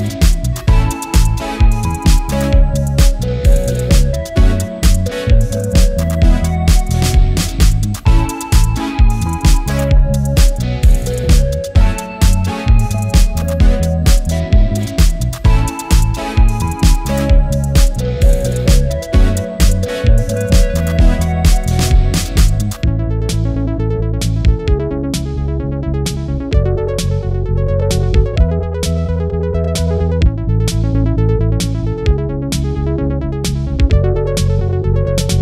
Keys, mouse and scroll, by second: 1.9 click, 2.8 space, 3.4 click, 3.7 space, 4.6 alt+scroll up 1, 4.7 alt+scroll down 1, 6.1 scroll up 1, 6.4 click, 9.8 click, 11.5 right click, 13.9 click, 16.9 scroll down 1, 18.9-19.7 typing, 19.7-21.1 scroll down 1, 21.1 click, 22.9 click, 22.9 typing, 26.0 click, 26.0 typing, 29.9 click, 31.4 typing, 33.2 typing, 33.6 click, 33.6 right click, 34.7 click.